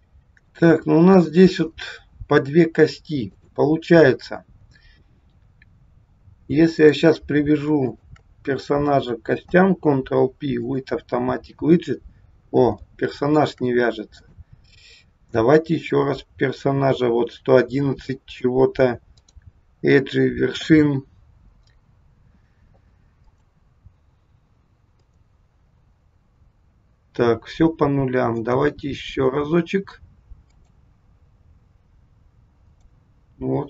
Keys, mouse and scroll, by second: 0.0 scroll up 2, 0.5 shift+middle click, 3.3 click, 4.4-5.2 scroll down 1, 6.8 click, 7.8 shift+click, 9.4 ctrl+p, 12.9 shift+middle click, 14.1 click, 15.8 click, 19.1 click, 23.1 click, 24.9 click, 28.4 click, 30.5 click, 32.6 click.